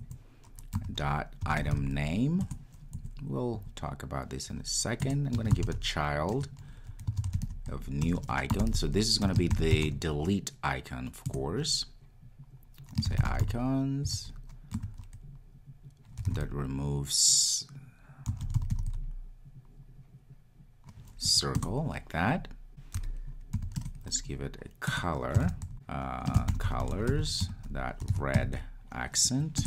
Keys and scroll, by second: 11.4 Return, 21.6 Return, 25.7 Return.